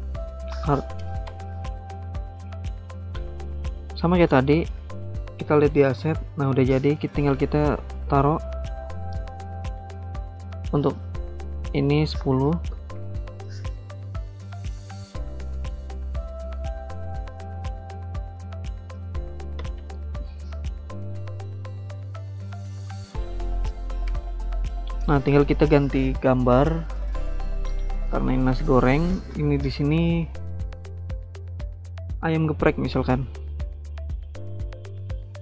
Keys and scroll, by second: 1.0 BackSpace, 1.1 BackSpace, 1.4 Return, 12.2-13.2 typing, 19.2-20.0 typing, 24.1 BackSpace.